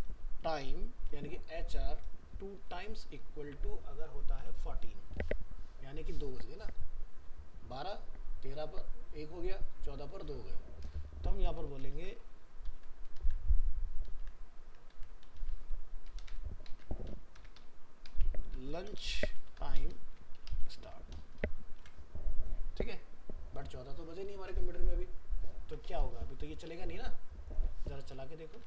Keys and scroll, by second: 5.2 ctrl+s, 12.0 ctrl+c, 12.7 ctrl+v, 13.2 ctrl+z, 14.9 ctrl+v, 16.3 ctrl+shift+Left, 21.8 ctrl+s, 28.0 ctrl+s, 28.5 alt+Tab.